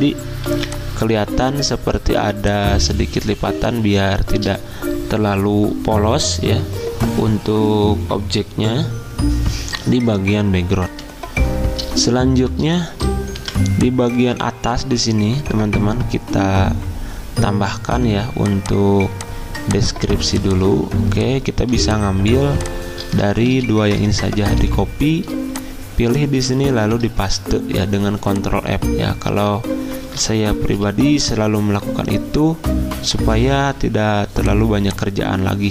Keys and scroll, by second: 0.5 z, 10.9 F10, 11.0 F10, 13.4 v, 23.5 ctrl+c, 24.6 Escape, 26.8 ctrl+f.